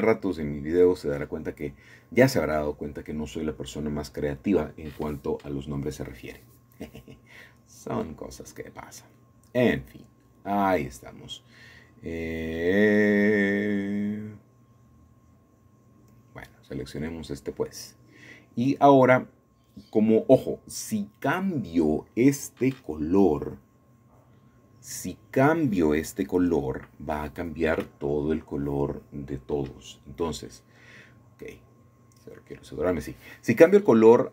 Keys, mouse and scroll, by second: 3.0 click, 8.3-9.1 shift+middle drag, 8.8-10.1 scroll down 3, 10.5-12.0 middle drag, 12.3-13.4 drag, 16.3-17.4 drag, 19.0 ctrl+z, 20.9-21.3 scroll up 5, 21.3 scroll down 2, 21.7-23.5 shift+middle drag, 23.5-24.6 drag, 25.2-26.3 drag, 29.2-30.3 drag, 30.8 click, 32.3-34.3 drag.